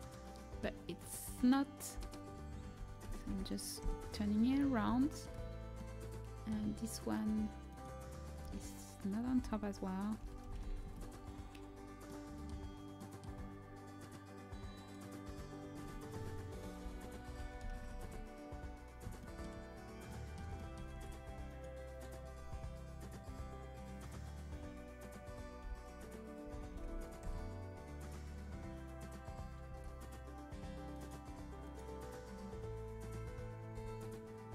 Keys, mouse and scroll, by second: 1.9 l, 2.7 r, 7.1-9.3 right drag, 8.4 a, 9.3 l, 10.1 r, 14.7-16.5 middle drag, 15.7 a, 16.7 l, 17.3 r, 20.8 a, 25.5 l, 26.3 r, 29.3-30.5 drag, 29.6 a, 30.8-33.6 drag, 33.6 l, 34.4 r.